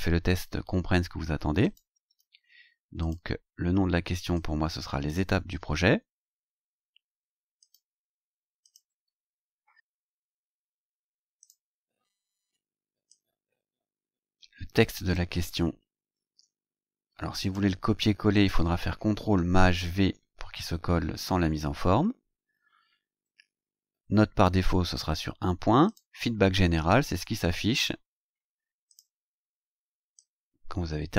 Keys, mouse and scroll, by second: 1.6 click, 3.0 click, 4.3-5.3 drag, 5.8 ctrl+c, 7.6 click, 8.6 ctrl+click, 9.1 ctrl+v, 10.0 click, 11.4 click, 13.1-15.3 drag, 16.2 ctrl+c, 17.4 click, 18.3 click, 19.7 ctrl+shift+v, 22.5-22.8 scroll down 2, 23.1 scroll down 2, 25.9 click, 28.9 click, 30.2-31.1 drag.